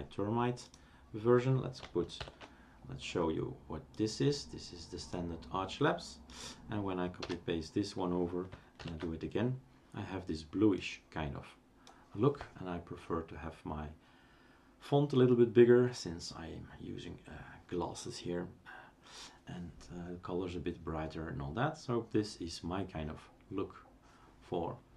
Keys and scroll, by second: 2.3 ctrl+alt+t, 7.2 Return, 9.0 ctrl+alt+t.